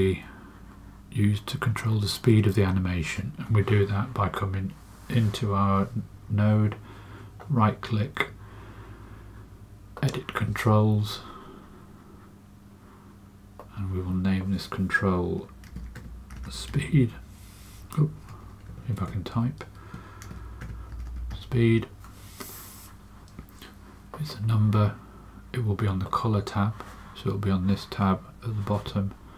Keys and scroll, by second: 15.4-17.1 typing, 18.6-21.7 typing.